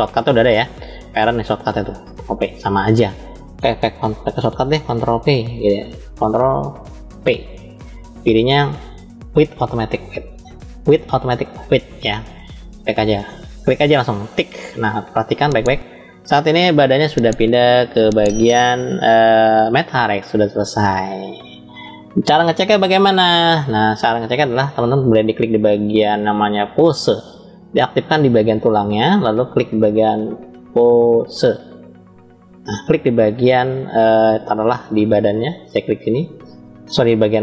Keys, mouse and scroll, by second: 7.0 ctrl+p, 24.0 click, 25.6-27.0 drag, 28.2 click, 30.0-32.0 drag, 35.7 click, 37.2-37.4 middle drag.